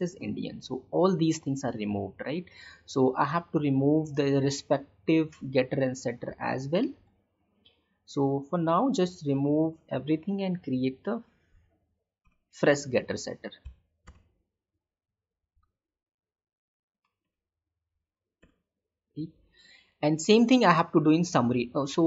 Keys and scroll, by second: 6.3 ctrl+y, 15.4 alt+Insert, 16.3 Down.